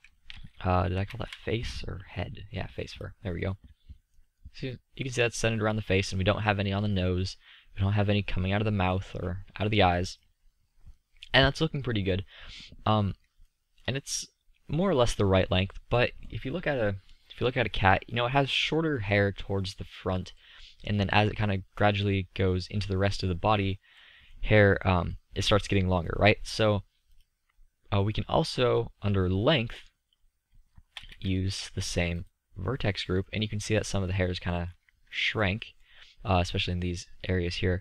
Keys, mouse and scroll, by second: 6.0 middle drag, 6.4 middle drag, 8.1 middle drag, 8.6-9.5 middle drag, 17.5-19.5 middle drag, 29.6-31.5 middle drag, 33.2-34.0 middle drag, 34.5-35.0 middle drag.